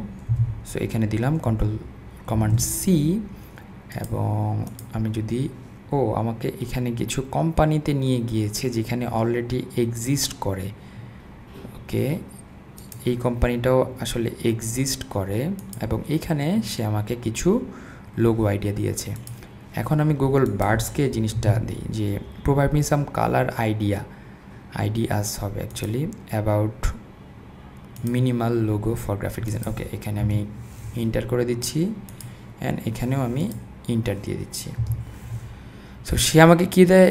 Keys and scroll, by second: 0.3 super+v, 1.5 super+a, 21.4 super+v, 30.2 Return, 34.8 Return.